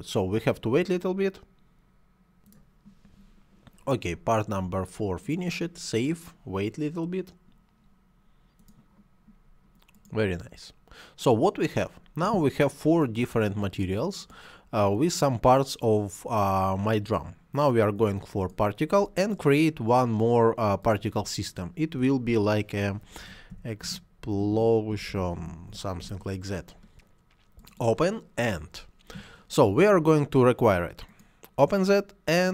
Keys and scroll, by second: 23.1-25.5 typing, 25.9 Return.